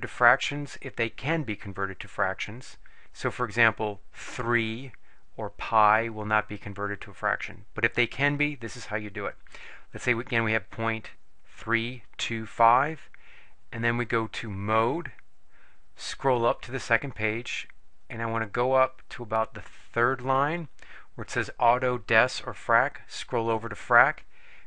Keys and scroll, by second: 10.5 ., 11.6 3, 12.2 2, 12.8 5, 16.8 Up, 18.0 Up, 18.8 Up, 19.4 Up, 20.2 Up, 23.4 Right, 23.9 Right.